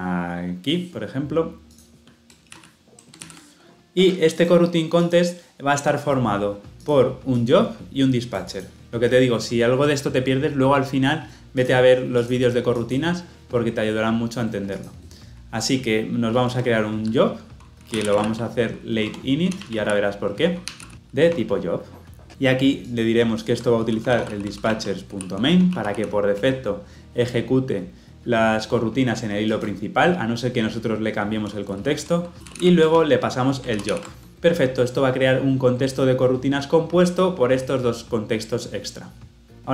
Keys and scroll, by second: 3.2 ctrl+v, 18.9 Tab, 20.1 Return, 21.2 Return, 25.5 Return, 32.7 Return, 33.7 ctrl+alt+l, 33.8 ctrl+alt+o.